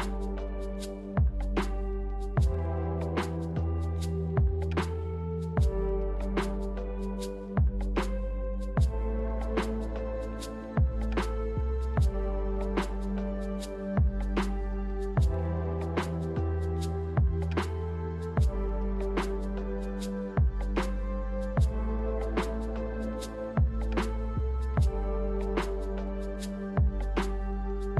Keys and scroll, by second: 15.6-19.9 typing, 21.5-22.3 typing.